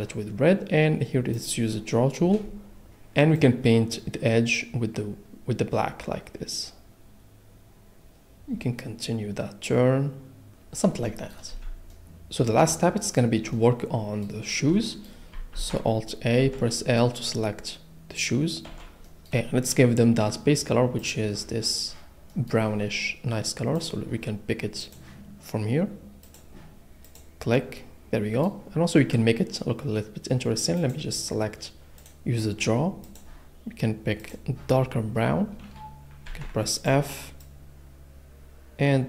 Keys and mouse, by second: 1.3 click, 1.9 middle click, 6.2 click, 7.9 click, 8.5-9.6 drag, 11.5 a, 13.5 click, 15.5 alt+a, 16.4 l, 18.7 l, 21.0 click, 23.8 click, 26.2 click, 27.1 click, 30.8 click, 32.0 click, 34.2 click, 36.2 f, 36.7 click.